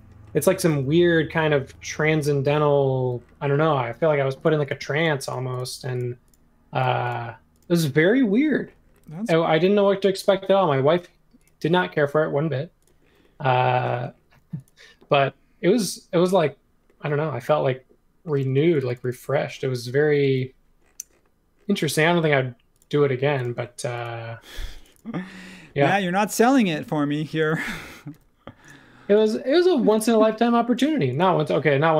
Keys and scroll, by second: 2.9 super+a, 9.5 m, 13.9 space, 18.4 space, 21.8 m, 23.4 space, 24.5 space, 28.1 m, 29.9 super+z, 30.8 space.